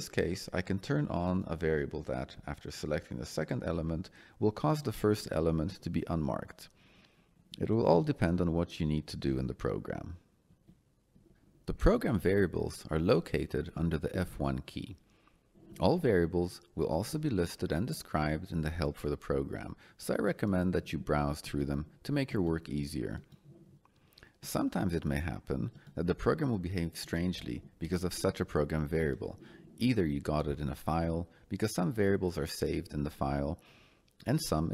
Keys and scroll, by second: 10.4 Escape, 14.4 F1.